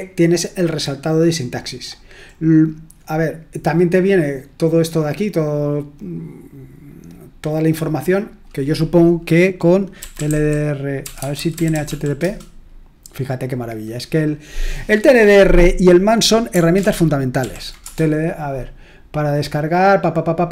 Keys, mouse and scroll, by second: 0.4-2.3 drag, 2.3-3.0 scroll up 1, 3.0-3.9 scroll up 1, 5.2-7.6 scroll down 1, 7.6-8.2 scroll down 1, 8.2 click, 9.7-12.3 typing, 16.8 ctrl+l, 17.4 ctrl+p, 17.8 Return.